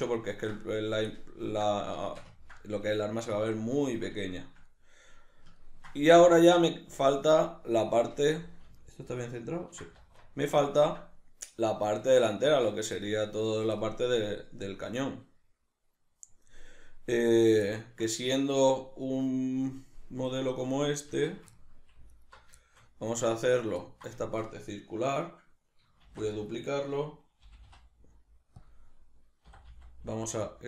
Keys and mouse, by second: 6.1 alt+q, 10.0 alt+q, 20.8 right click, 21.1 Tab, 21.6 ctrl+middle click, 22.1 alt+right click, 22.6-27.4 shift+middle drag, 26.0 shift+d, 26.5 right click, 27.4 g, 28.7 click, 29.5 e.